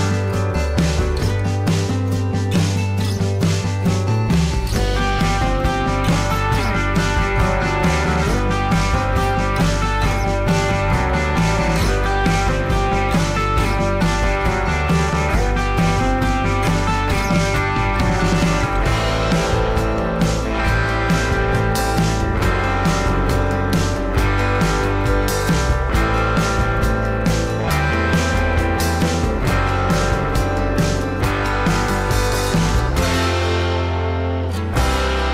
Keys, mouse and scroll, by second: 6.4 alt+scroll up 1, 7.3-7.7 alt+scroll down 1, 26.2 ctrl+g, 32.0 alt+shift+click, 35.1-35.3 alt+scroll up 1.